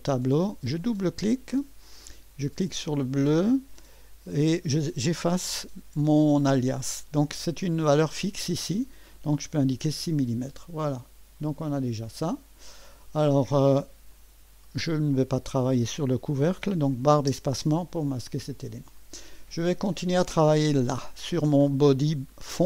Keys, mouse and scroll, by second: 0.8 click, 1.0 click, 2.7 click, 4.8-5.6 typing, 5.1 click, 9.1-9.9 typing, 10.0-14.1 Return, 11.0 click, 11.6-13.1 drag, 14.1 click, 17.2 space, 19.0 click.